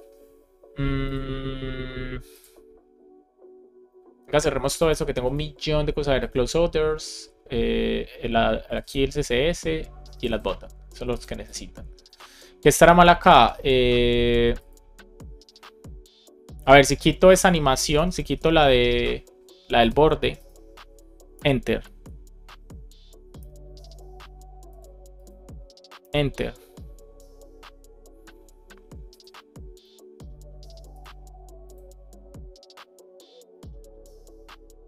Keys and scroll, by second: 17.7 BackSpace, 18.3 BackSpace, 18.8 super+s, 21.3 Return, 23.3 Return, 25.9 Return.